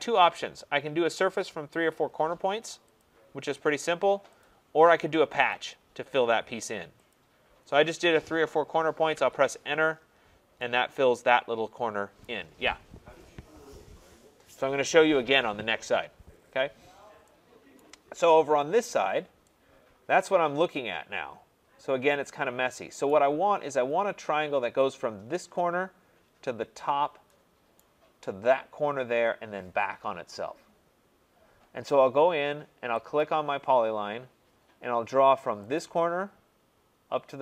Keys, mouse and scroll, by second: 3.0 click, 4.4 click, 5.5 click, 7.1 click, 9.1 Return, 10.2 middle click, 10.3 middle click, 12.2 right click, 16.2 middle click, 16.4 middle click, 16.9 middle click, 17.0 middle click, 17.8 right click, 18.1 middle click, 18.5 middle click, 18.5 middle click, 18.6 middle click, 19.5 scroll, 23.1 right click, 27.8 right click, 33.2 click, 35.7 click.